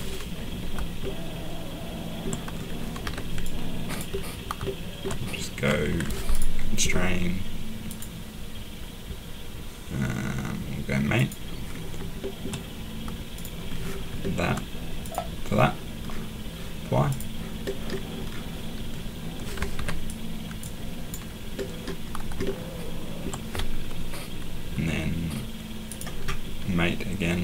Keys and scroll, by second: 3.0 Escape, 19.7 Escape.